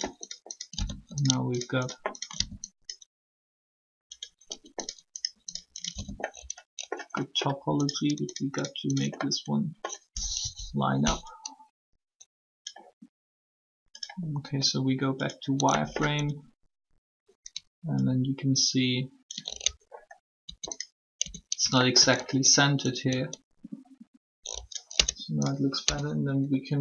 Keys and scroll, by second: 10.4 shift+1, 20.4 ctrl+Tab, 21.2 Tab, 24.9 Tab, 25.8 Tab.